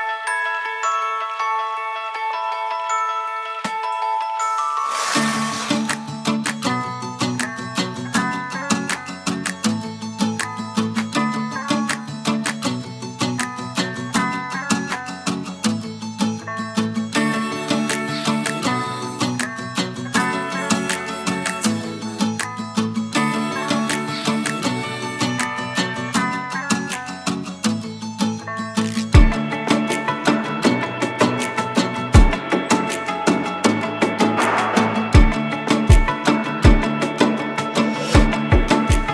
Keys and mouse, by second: 2.4 shift+middle click, 6.0 middle click, 7.3 middle click, 8.1 KP_1, 8.6 a, 8.7 a, 9.1 alt+z, 9.5 middle click, 9.9 alt+z, 10.1 middle drag, 12.2 ctrl+KP_7, 14.2 2, 16.4-16.9 middle drag, 17.2 shift+middle drag, 17.6 middle click, 18.7 click, 19.0-22.3 drag, 23.5 g, 33.4 middle click, 34.4 KP_1, 34.8 alt+z, 36.8 shift+click, 38.0 g.